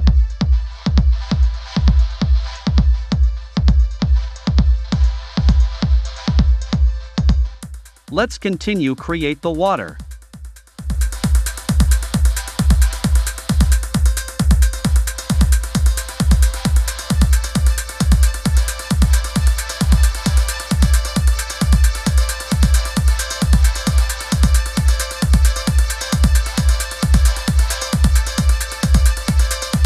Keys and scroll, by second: 12.1 v, 12.5 Down, 13.1 Down, 23.2 super+c, 23.8 super+v.